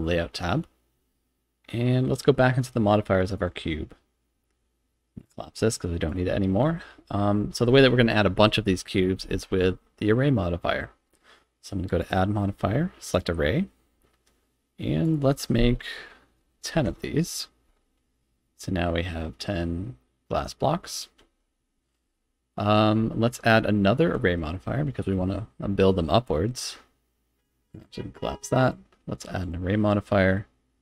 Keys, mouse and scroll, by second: 3.4 click, 5.2 click, 6.1 click, 12.0-13.2 drag, 15.0-17.6 drag, 18.1 scroll down 2, 18.4-21.0 middle drag, 21.2 z, 22.1 shift+middle click, 23.0 z, 27.7 click, 28.6 click.